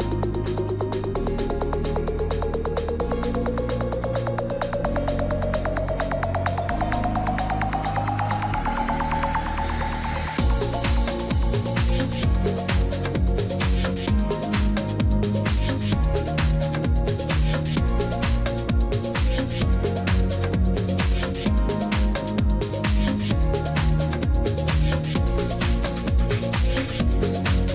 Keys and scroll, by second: 0.2 ctrl+t.